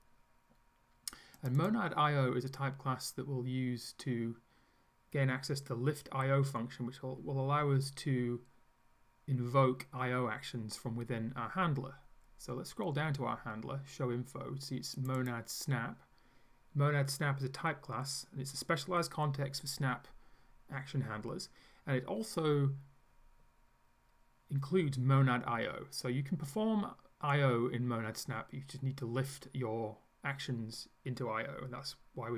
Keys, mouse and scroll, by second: 1.4 click, 12.0-13.7 scroll down 5, 15.0 click.